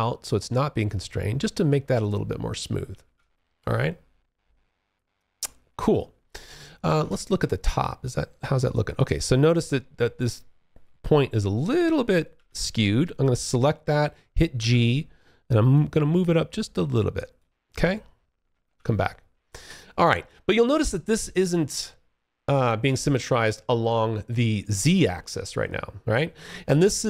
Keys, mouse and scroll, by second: 2.1 space, 2.2 1, 2.9 alt+click, 5.7 space, 6.2 2, 12.5 click, 13.8 g, 14.9 click, 17.7 space, 17.8 1.